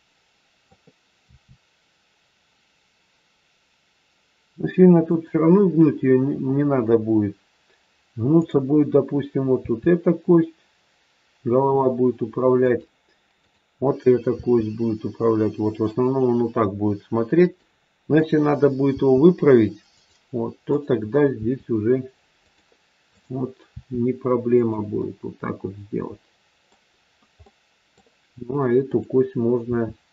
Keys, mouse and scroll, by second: 1.2 r, 8.3 click, 9.4 r, 13.3 click, 14.3 r, 18.2 click, 18.8 r, 20.7 click, 21.3 r, 23.1 click, 23.6 r, 24.9 middle click, 26.9 scroll down 1, 27.5 middle click, 28.8 click, 29.6 r.